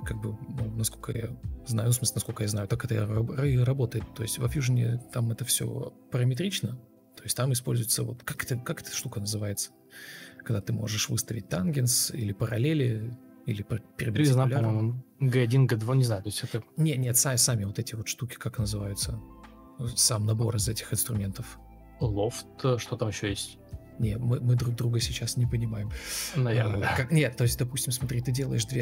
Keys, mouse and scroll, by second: 0.5 ctrl+space, 2.6 ctrl+space, 2.7 ctrl+space, 3.9 F4, 5.0 ctrl+e, 5.3 ctrl+space, 11.5 ctrl+space, 14.5 ctrl+space, 14.6 ctrl+space, 16.5 Escape, 20.5 Delete, 23.8 ctrl+space, 24.6 ctrl+space, 25.4 shift+o, 26.3 ctrl+shift+o, 28.3 ctrl+a.